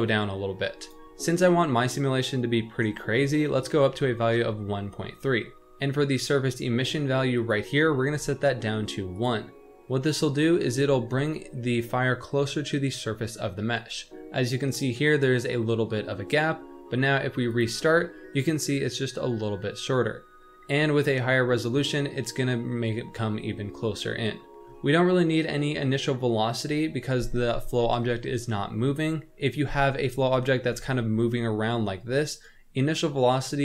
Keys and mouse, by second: 0.9-4.2 drag, 7.4-9.1 drag, 10.3 shift+middle drag, 17.5 click, 30.6 g.